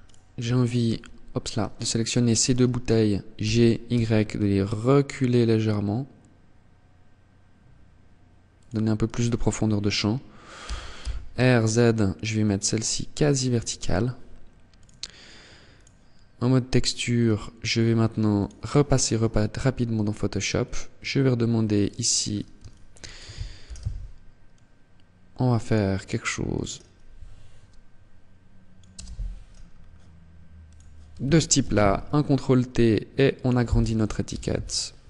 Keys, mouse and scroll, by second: 0.9 shift+right click, 2.5 g, 7.7 click, 8.1 right click, 9.7 r, 12.5 click, 13.8 click.